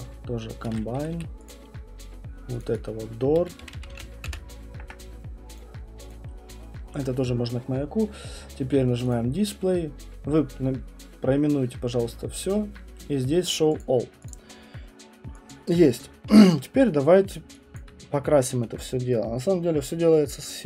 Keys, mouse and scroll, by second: 0.6 shift+right click, 0.9 F1, 1.1 F1, 1.5 click, 2.6 click, 2.7 click, 2.8 shift+click, 3.1-6.1 typing, 5.5 Return, 5.6 click, 5.8 Return, 6.1 click, 8.9-9.6 typing, 9.1 click, 13.8 click, 14.3 click, 14.5 middle click, 15.2 middle click, 15.5 alt+click, 15.5 alt+click, 15.9 alt+middle click, 16.0 alt+middle click.